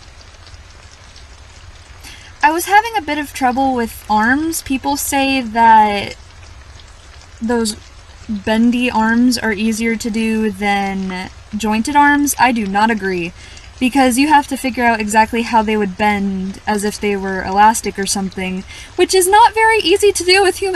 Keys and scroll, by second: 2.3 scroll up 1, 4.0-4.4 scroll up 1, 5.0-5.4 scroll down 1, 7.5-7.9 scroll down 1, 9.7-10.1 scroll up 1, 11.1-11.5 scroll up 1, 11.6-12.1 scroll down 1, 12.8 scroll up 1, 14.1-14.5 scroll up 1, 15.6 scroll down 1, 19.3 scroll down 1.